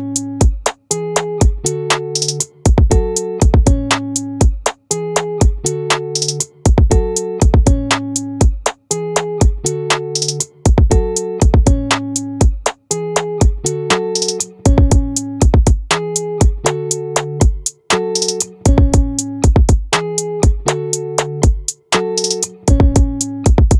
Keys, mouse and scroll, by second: 2.5 ctrl+r.